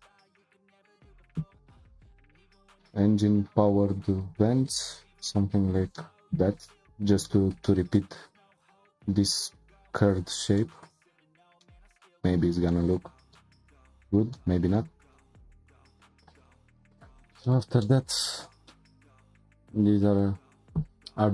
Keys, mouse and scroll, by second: 4.6-5.1 scroll down 2, 5.1-6.0 scroll up 1, 6.0-11.1 shift+middle drag, 11.1-11.6 scroll down 2, 11.6-16.3 shift+middle drag, 16.3 click, 16.6 scroll down 3, 16.9 click, 17.4-21.3 shift+middle drag.